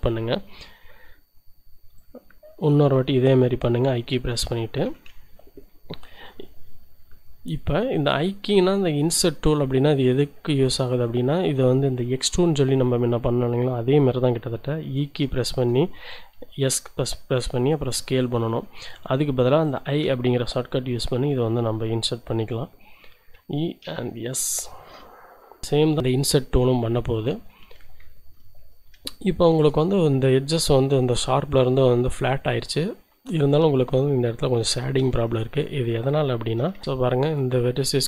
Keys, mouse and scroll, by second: 1.9 click, 2.8 i, 4.4-5.5 drag, 7.5-8.5 drag, 8.6-9.6 shift+drag, 10.6 right click, 15.1 e, 16.6 s, 19.7 click, 23.3 e, 23.8 s, 25.6 z, 26.3-27.6 drag, 27.6 z, 28.1 shift+click, 28.6 Tab, 29.1-31.0 shift+drag, 32.6-35.0 drag, 35.2 Tab, 35.6 click, 36.6 shift+click, 36.7 shift+z, 36.9 shift+z, 37.3-37.7 shift+scroll down 1.